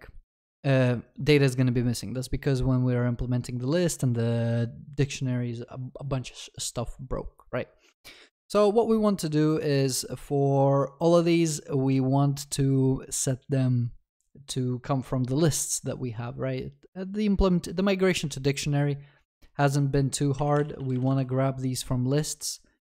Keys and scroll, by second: 21.2 ctrl+s.